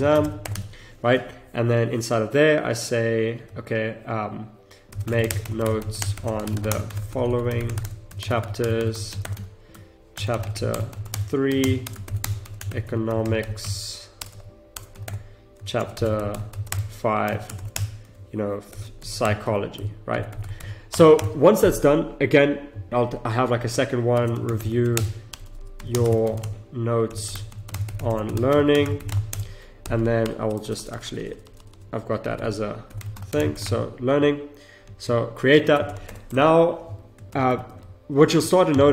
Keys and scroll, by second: 0.0 space, 0.5 Tab, 4.9 shift+m, 5.3 space, 6.0 space, 9.4 Tab, 10.2 shift+c, 11.1 space, 11.7 space, 14.2 BackSpace, 15.0 Return, 15.8-18.7 typing, 20.6 BackSpace, 20.9 Return, 24.9 space, 25.3 BackSpace, 25.9 space, 27.7 s, 29.3 space, 30.2 BackSpace, 35.8 BackSpace, 35.9 Return, 37.3 ctrl+z.